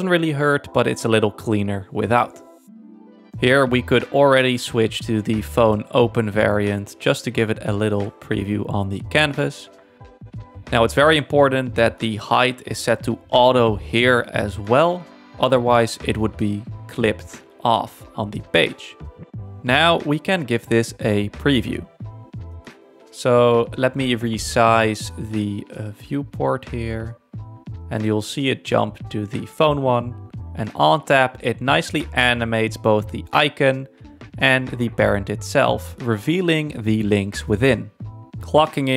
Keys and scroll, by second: 18.2 super+1.